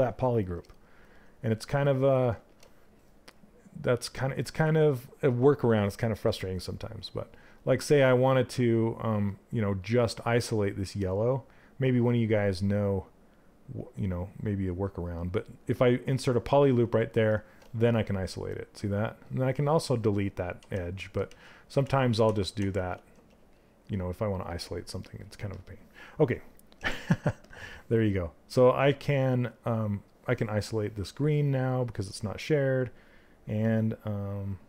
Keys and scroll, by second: 20.1 ctrl+z.